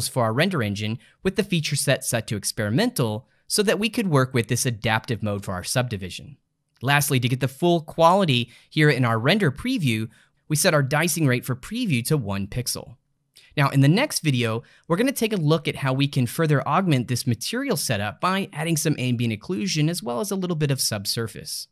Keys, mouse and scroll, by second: 3.5 click, 8.0 click.